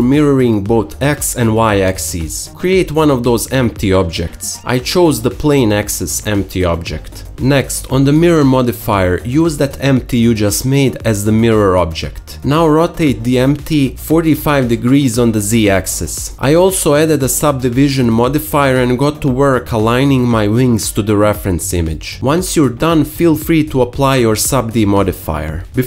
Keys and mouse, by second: 1.0 click, 1.4 click, 1.8-8.4 shift+middle drag, 1.8 shift+a, 8.4 click, 8.6-10.2 middle drag, 10.2 click, 10.3-12.6 middle drag, 12.6-13.9 drag, 13.9 r, 15.8 middle click, 16.8 Tab, 16.9 alt+click, 17.1 alt+3, 17.2 middle click, 17.7-23.0 typing, 19.0 ctrl+r, 19.8 ctrl+r, 19.8 click, 20.1 click, 20.5 alt+shift+click, 21.3 click, 21.7 ctrl+click, 21.8 ctrl+r, 21.9 shift+middle click, 22.3 middle click, 22.5 alt+shift+middle click, 22.9 middle click, 23.1-24.1 drag, 23.1-24.1 middle drag, 23.1-24.1 right drag.